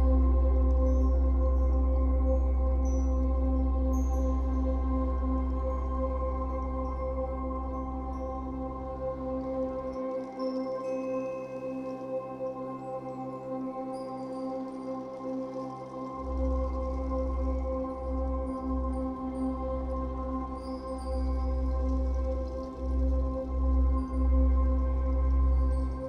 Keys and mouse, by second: 0.0-1.4 drag, 1.4 Return, 1.4 typing, 5.2 click, 5.8 click, 6.5 click, 7.1 click, 11.2 click, 12.7-14.0 typing, 14.3 Return, 16.0 click, 17.1 click, 17.7-18.4 typing, 19.4 click, 21.0 click, 22.1-23.9 typing, 22.4 click.